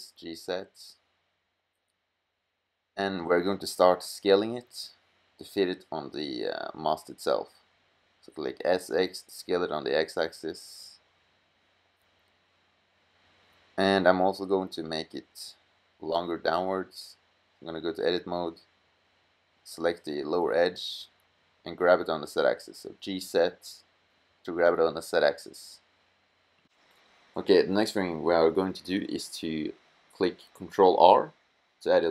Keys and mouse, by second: 4.0-5.0 middle drag, 5.2 middle click, 5.9-7.1 middle drag, 7.1 s, 10.3 click, 14.1-15.5 middle drag, 21.4 g, 27.2-30.4 middle drag, 31.0 ctrl+r.